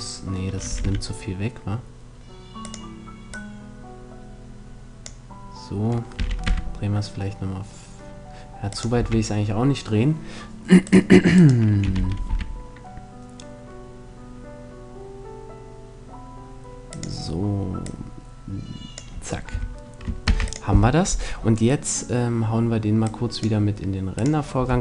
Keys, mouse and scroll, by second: 0.3 r, 0.5 middle click, 2.4-4.7 drag, 5.8 r, 8.6-10.2 drag, 8.6 a, 10.2 middle click, 10.6-12.9 right drag, 11.5 r, 17.0-19.2 drag, 19.2 a, 19.9 ctrl+s, 22.6-24.8 drag.